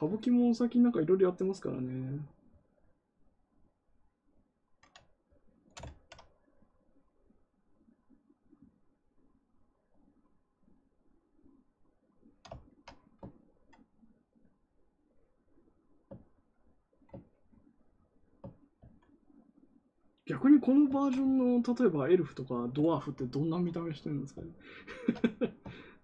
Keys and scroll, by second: 18.7 ctrl+z.